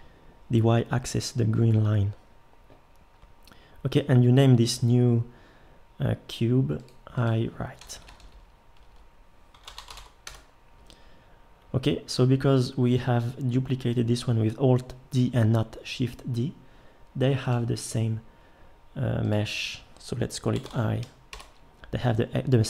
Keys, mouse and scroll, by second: 7.9-12.1 drag, 7.9 BackSpace.